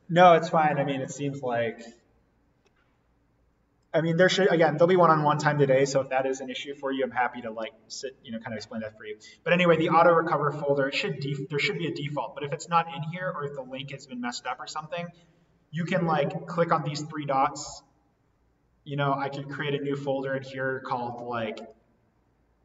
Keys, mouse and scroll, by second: 3.8 click, 11.5 click, 16.7 click, 19.6 right click, 21.5 click, 22.3 click.